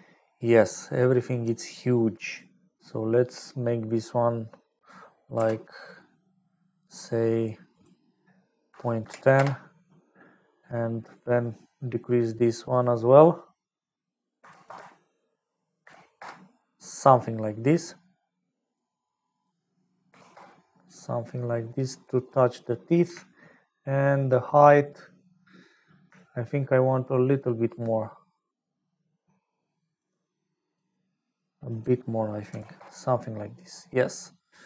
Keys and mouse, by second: 0.9 click, 1.9 click, 4.6-6.6 drag, 6.8 click, 7.6-10.2 middle drag, 11.1-17.1 drag, 18.6-21.3 drag, 24.6-25.7 middle drag, 27.8-29.9 shift+middle drag, 33.9-34.6 middle drag.